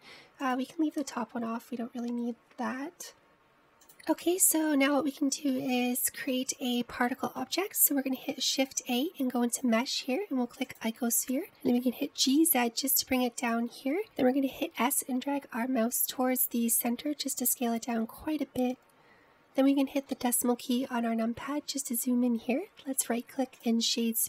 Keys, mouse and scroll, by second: 3.2 middle click, 4.9 click, 5.4-6.2 shift+middle drag, 6.2-6.9 scroll up 1, 6.9-9.3 shift+middle drag, 9.3 shift+a, 12.8 g, 15.6 s, 21.1 KP_Decimal, 22.6-24.0 scroll down 7, 24.0 right click.